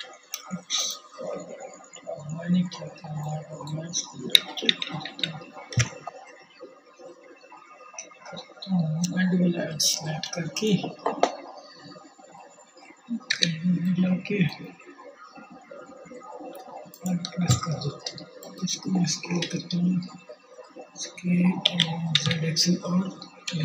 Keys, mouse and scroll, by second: 2.4 ctrl+z, 2.8 ctrl+z, 11.7 2, 17.8 KP_1, 20.1 s.